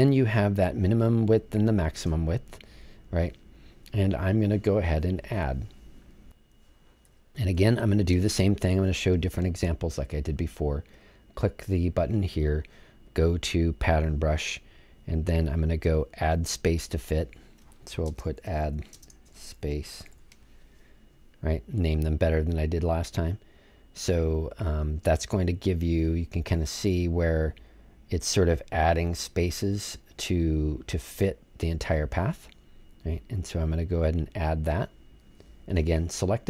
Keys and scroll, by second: 18.0-20.5 typing.